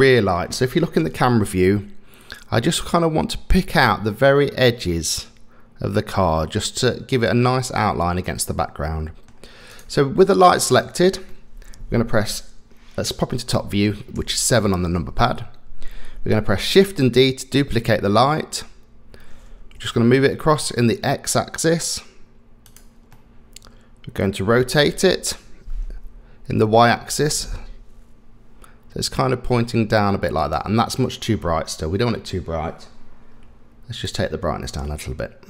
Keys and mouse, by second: 1.0 KP_0, 8.6 middle click, 11.3 middle click, 14.2 KP_7, 16.9 shift+d, 23.1-24.3 middle drag, 24.9 r, 34.0-35.4 drag.